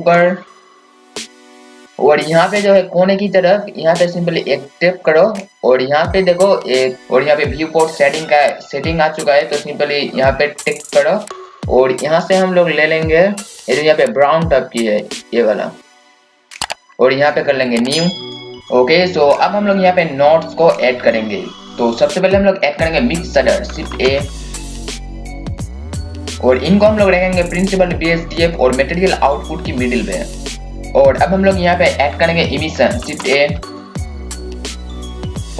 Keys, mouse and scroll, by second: 4.9-19.3 drag, 19.3-19.9 scroll up 1, 20.8 click, 23.9-25.8 typing, 24.2 click, 25.9 click, 33.0-34.7 typing, 33.8 click, 34.6-35.5 drag.